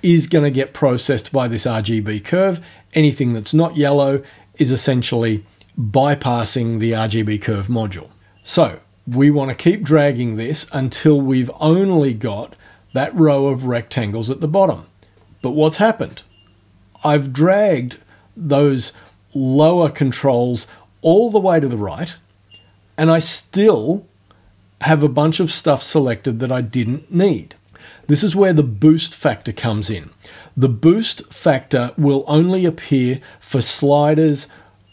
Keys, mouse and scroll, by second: 9.5-15.3 drag.